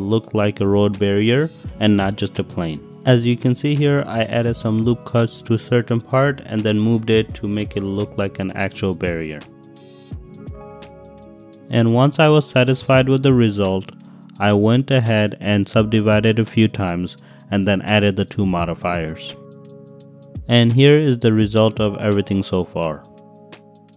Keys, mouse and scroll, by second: 0.8 ctrl+r, 1.9 click, 2.5-3.5 typing, 3.7 Return, 4.2 click, 4.7 click, 5.0-7.5 typing, 5.7 Return, 6.1 click, 7.7 Return, 8.1 click, 8.8 click, 9.0 click, 9.6 ctrl+y, 9.7 click, 10.2-10.6 typing, 10.9 Return, 11.1 click, 11.6 click, 11.9 shift+click, 12.2 shift+click, 12.7-13.1 drag, 13.6 click, 14.3 shift+click, 14.9 click, 15.5 click, 16.0-16.4 drag, 16.6 g, 16.6 z, 17.8 shift+middle click, 18.7 click, 18.9 g, 19.3 x, 20.1 middle click, 21.6-22.2 drag, 22.6 click, 22.8 middle click, 23.3 shift+click, 23.9 ctrl+s.